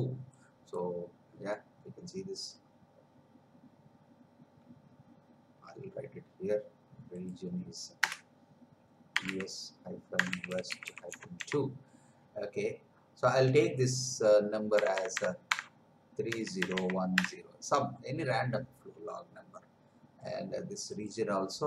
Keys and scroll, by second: 8.0 Return, 9.1 u, 10.3 w, 14.7 BackSpace, 16.3 3.